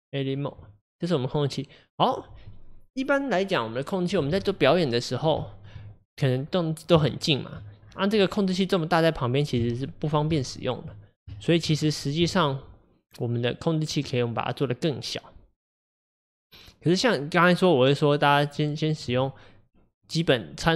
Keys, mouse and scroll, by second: 0.6 Tab, 4.7-5.9 middle drag, 5.9-6.5 scroll up 3, 6.5-7.0 scroll up 6, 7.0 shift+middle click, 7.8-8.6 scroll down 9, 9.6 KP_1, 10.5-11.7 shift+middle drag, 11.7-12.4 scroll up 4, 20.2 click.